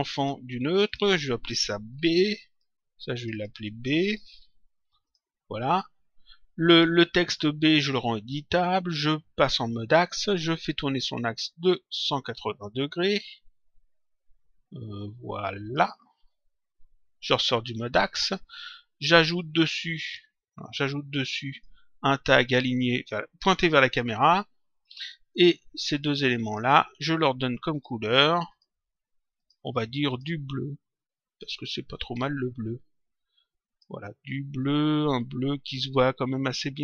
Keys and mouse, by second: 0.8 click, 1.9 shift+b, 2.5 click, 4.2 shift+b, 5.0 click, 6.6 click, 8.2 click, 9.9 click, 12.1 click, 14.2 shift+click, 17.2 click, 19.9 click, 21.4 right click, 24.0 click, 25.9 click, 26.3 shift+click, 27.7 click, 31.3 click, 32.4 click, 34.5 click.